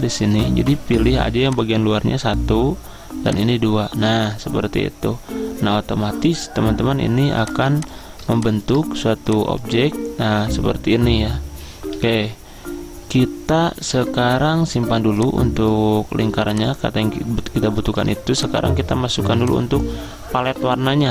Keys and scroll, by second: 12.0 ctrl+z.